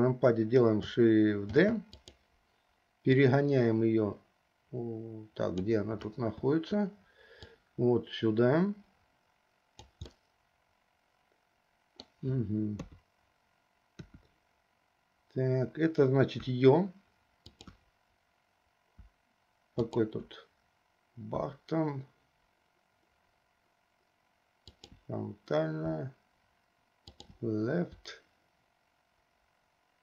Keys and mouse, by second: 1.7 shift+d, 3.3-5.9 drag, 7.7-10.1 drag, 10.3-12.4 middle drag, 13.0 KP_3, 14.2 KP_1, 19.1 `, 21.5 `, 28.1 `.